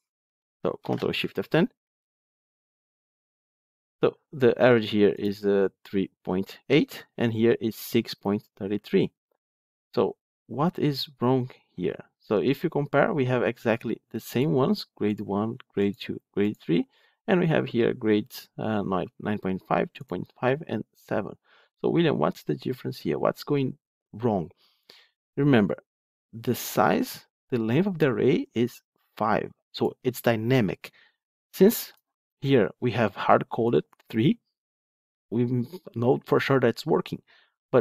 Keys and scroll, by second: 0.7 ctrl+shift+F10.